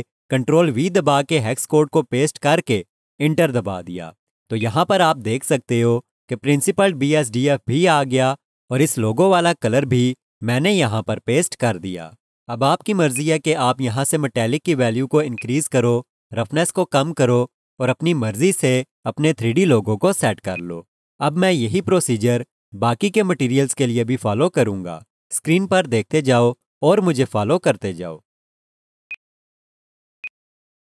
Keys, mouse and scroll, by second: 0.7 ctrl+v, 4.6 click, 13.1 click, 29.1 click.